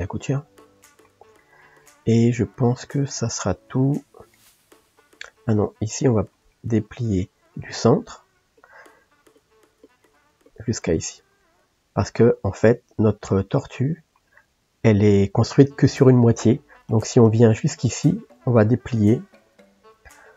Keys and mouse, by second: 0.8-4.2 ctrl+middle drag, 4.4 middle click, 4.9-7.6 middle drag, 7.6 click, 8.6 shift+click, 9.3 shift+click, 9.8 shift+click, 10.5 shift+click, 11.0-14.7 ctrl+middle drag, 20.2-20.3 middle drag.